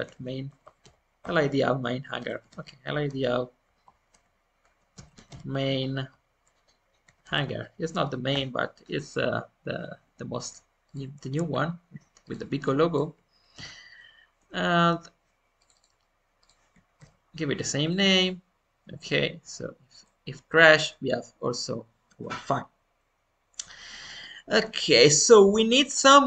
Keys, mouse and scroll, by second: 19.9-21.7 middle drag, 21.7 scroll up 1, 22.2-24.3 middle drag, 24.3 scroll up 2, 24.7-26.2 middle drag.